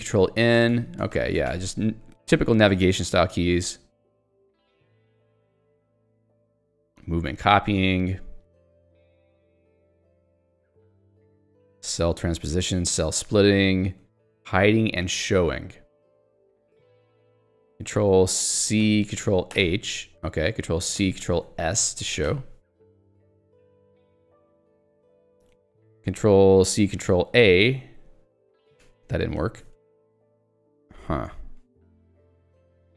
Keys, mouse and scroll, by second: 0.2 ctrl+n, 1.2 ctrl+p, 2.0 j, 4.2 k, 5.3 j, 7.8 ctrl+d, 14.1 j, 16.2 k, 19.6 ctrl+h, 21.5 ctrl+s, 22.3 j, 24.7 k, 27.4 ctrl+a, 28.9 ctrl+g, 29.8 ctrl+a.